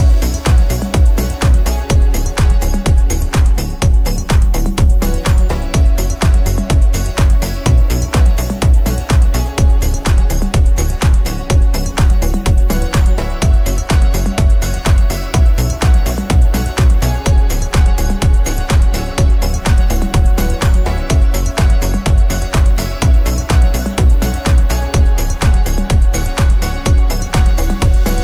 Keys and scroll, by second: 5.8 v.